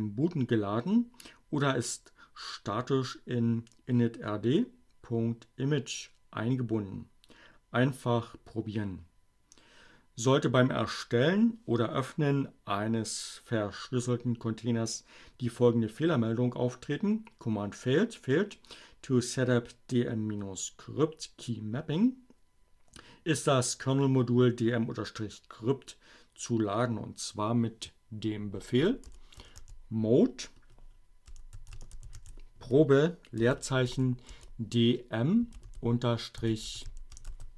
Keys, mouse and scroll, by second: 27.4-28.3 typing, 30.3-33.7 typing, 35.4-37.4 typing.